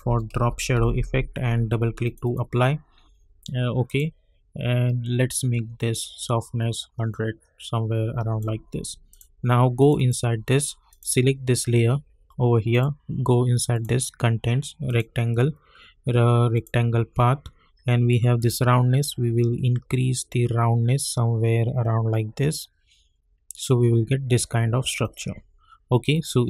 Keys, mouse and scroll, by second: 0.0-1.2 typing, 2.0 click, 6.1-25.0 drag.